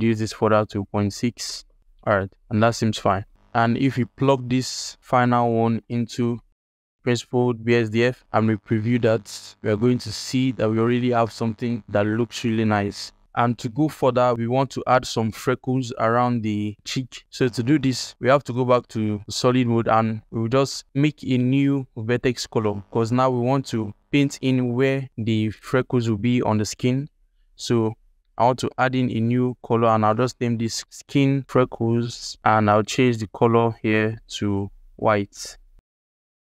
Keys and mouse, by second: 3.8 alt+shift+click, 4.4 alt+shift+click, 5.0 click, 5.3 g, 6.5-6.9 drag, 7.4 alt+click, 7.8 ctrl+shift+click, 18.1 ctrl+Tab, 18.3 z, 23.5 alt+click, 24.2 ctrl+middle click, 27.6-36.5 drag.